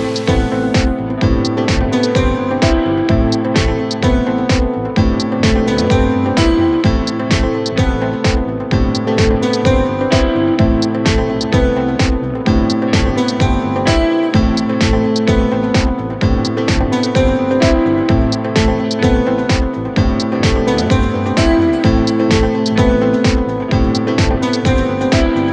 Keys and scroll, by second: 2.3 ctrl+z, 13.3 Delete, 17.7 shift+Page_Up, 18.9 shift+Page_Down.